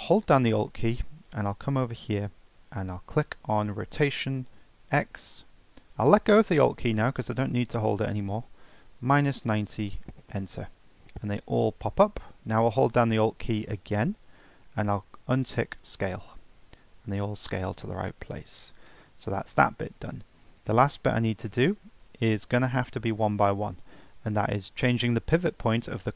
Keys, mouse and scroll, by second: 0.8-3.2 scroll down 4, 3.2-6.3 alt+drag, 16.1 alt+click, 17.4-20.5 middle drag, 20.5-21.0 scroll up 1, 21.0-24.6 middle drag.